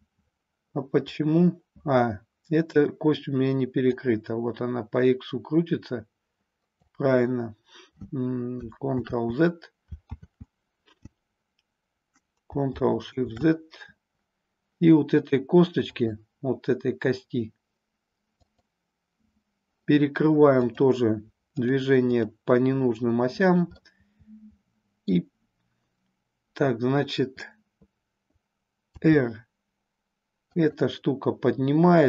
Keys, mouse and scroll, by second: 3.9-6.9 drag, 9.0 ctrl+z, 10.3 ctrl+z, 13.2 ctrl+shift+z, 15.9-18.8 drag, 20.7 click, 21.5 click, 22.1 click, 23.9-25.2 middle drag, 28.9 r, 30.7 click.